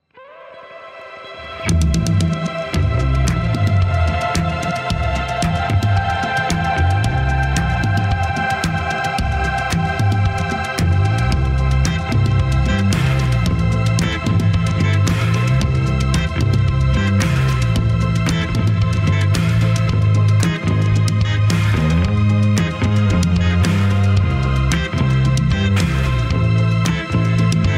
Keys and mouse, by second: 0.5-5.4 middle drag, 5.9 middle click, 7.5-10.0 drag, 10.5 shift+click, 14.9-27.7 middle drag.